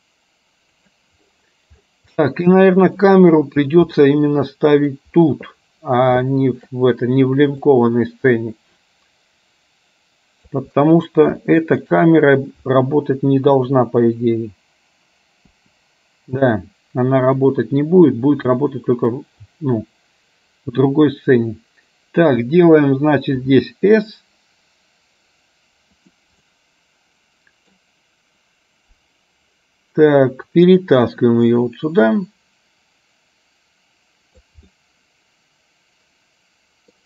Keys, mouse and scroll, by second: 2.4 middle click, 4.1 middle click, 5.8 middle click, 6.5 shift+middle click, 7.6-10.6 drag, 11.5 shift+middle click, 13.6 KP_0, 15.6 KP_0, 17.5 click, 18.6-22.4 middle drag, 23.5 s, 26.5-27.9 middle drag, 31.5-34.6 drag, 34.8-37.0 middle drag.